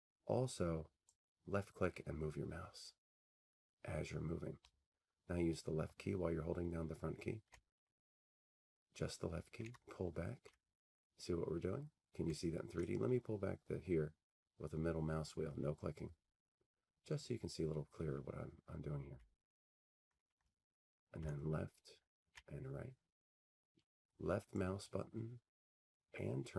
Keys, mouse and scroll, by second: 0.1-0.6 Up, 0.7-5.2 scroll up 129, 8.0-9.7 Left, 9.7-10.7 Down, 10.7-11.4 Left, 12.8 click, 13.7 scroll, 14.3 scroll, 15.2 middle click, 15.5 middle click, 16.2 middle click, 17.0 middle click, 19.7-20.1 scroll up 12, 20.1 Up, 21.0 Up, 21.0 Down, 21.2-22.4 Left, 22.4-23.5 Right.